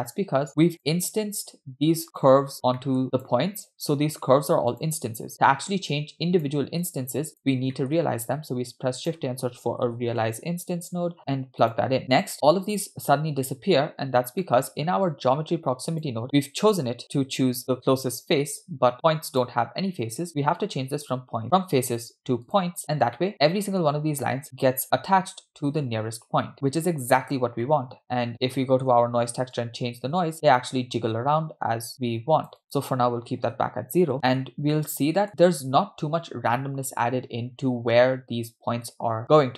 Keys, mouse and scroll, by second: 0.5-1.1 scroll up 3, 1.1 click, 1.2 middle click, 1.6-2.0 scroll up 3, 2.2 click, 2.8 scroll down 2, 2.8 middle click, 3.8 click, 4.7 click, 5.9-6.5 drag, 6.9 click, 7.8 middle click, 8.2 shift+a, 12.0-12.9 scroll up 5, 14.5 middle click, 14.9-15.3 scroll down 2, 15.3-15.9 scroll up 4, 16.0 click, 19.4 click, 20.3-22.7 drag, 23.2-23.8 middle drag, 26.5-27.6 scroll down 3, 27.7-28.9 middle drag, 29.6-32.5 drag, 32.6-34.1 drag, 34.4-34.7 scroll down 2, 34.7 middle click, 35.3-35.9 scroll up 3, 37.5 scroll down 2.